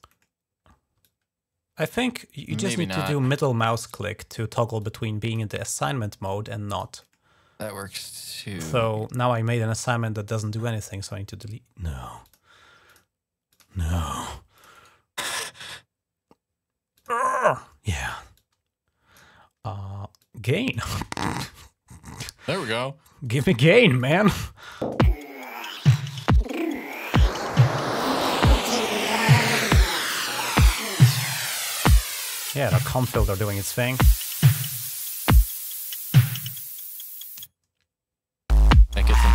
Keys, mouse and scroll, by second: 0.9 alt+click, 3.4 middle click, 4.1 middle click, 4.6 click, 6.0 click, 7.0 middle click, 7.4 click, 8.0 right click, 10.1 click, 12.0 click, 12.7 click, 13.3 click, 13.9 Escape, 14.3 click, 14.5 click, 14.5 right click, 16.7 click, 18.1 click, 20.0 click, 20.9 space, 22.3 space, 22.6-23.8 drag, 24.4 click, 25.7 click, 26.9 click, 28.2 click, 29.4 click, 30.0 click, 30.6 click, 31.7 click.